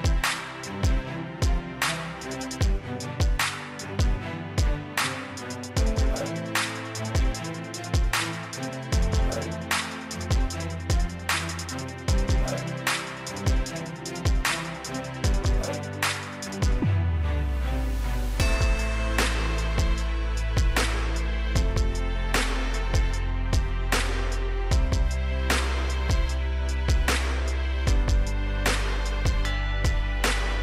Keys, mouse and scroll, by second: 4.1 right click, 5.2 click, 11.1 5, 11.7 Return, 12.9 click, 15.0-17.8 scroll down 1, 17.9 click, 19.3-20.4 scroll up 1, 20.4 click, 22.9 Return, 24.1 click, 29.1-30.3 scroll down 1, 30.3-30.6 scroll up 1.